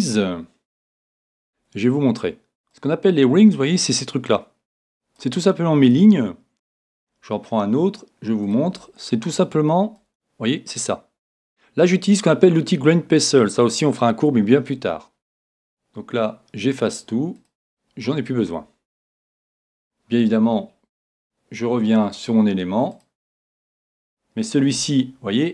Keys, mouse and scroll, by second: 8.5-10.2 drag, 17.4-19.4 drag, 22.9-24.8 drag, 24.8 Tab.